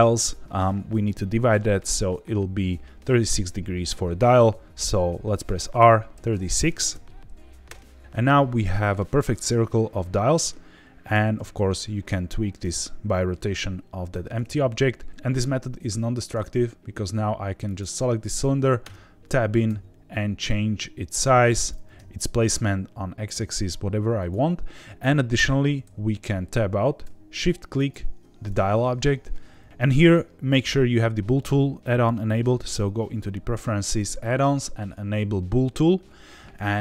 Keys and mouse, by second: 5.7 r, 6.1 KP_3, 6.9 KP_6, 7.6 KP_Enter, 9.9-10.5 middle drag, 11.1 r, 11.3 z, 14.0 Escape, 17.6 click, 18.8 Tab, 19.6 s, 21.6 click, 21.7 g, 21.9 x, 24.1 click, 25.3 Tab, 27.7 shift+click.